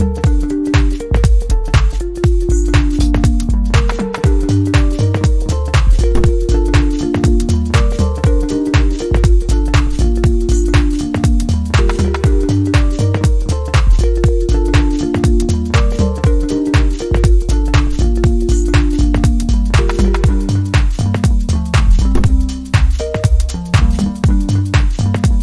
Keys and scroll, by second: 9.5-9.9 scroll up 1, 11.9 scroll down 1, 12.1 scroll up 1, 12.3 scroll down 1, 12.5-12.8 scroll up 1, 14.2 scroll down 1, 14.3 scroll up 1, 14.4 scroll down 1, 14.5-14.9 scroll up 1, 22.5 scroll down 1, 23.1-23.5 scroll up 1.